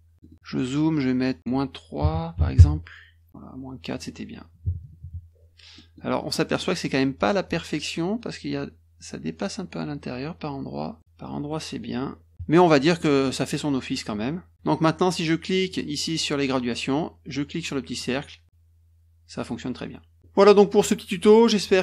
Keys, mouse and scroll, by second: 0.2 middle click, 1.4 click, 3.9 click, 5.7 middle click, 6.2 middle click, 6.5 middle click, 11.0 middle click, 11.5 middle click, 12.9 middle click, 15.6 click, 17.9-21.8 drag.